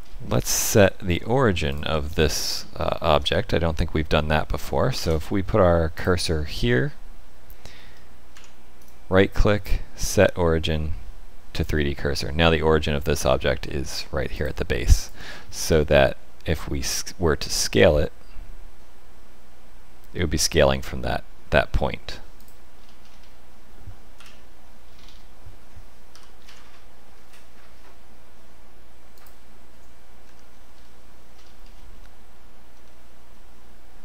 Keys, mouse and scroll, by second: 0.0 click, 0.0-1.1 scroll up 9, 1.6 alt+click, 2.2-2.8 scroll down 5, 2.8 shift+middle click, 3.3 middle click, 4.9 shift+s, 7.9 middle click, 8.3 Tab, 8.8 right click, 14.3 click, 14.9 click, 15.3-15.9 scroll down 7, 15.9 middle click, 17.7 s, 22.7-23.2 scroll up 4, 23.7-24.0 scroll up 2, 24.1 KP_1, 24.8-26.1 scroll up 5, 26.1-26.4 scroll up 1, 26.1 g, 30.2 Tab, 30.4-31.3 scroll down 5, 31.3-32.0 scroll up 4, 32.0 middle click, 32.8 middle click.